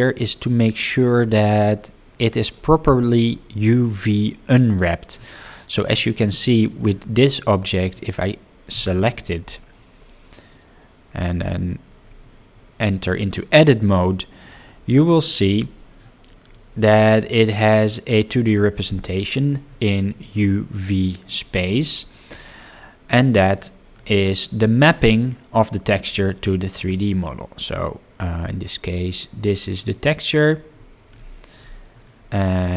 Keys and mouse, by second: 5.8 click, 6.2 drag, 6.7 click, 11.0 Tab, 20.6 middle click, 27.0-30.4 drag.